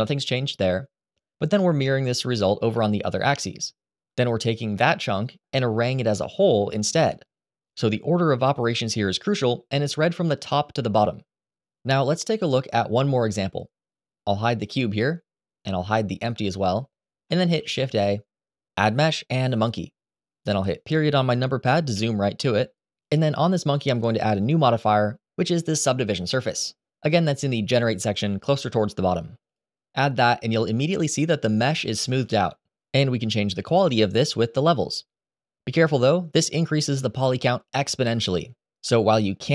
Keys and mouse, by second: 1.3 click, 2.5-4.0 middle drag, 6.9 click, 14.4 click, 16.1 click, 17.3 shift+a, 21.6 KP_Decimal, 24.5-29.3 drag, 36.1 click, 36.9 click.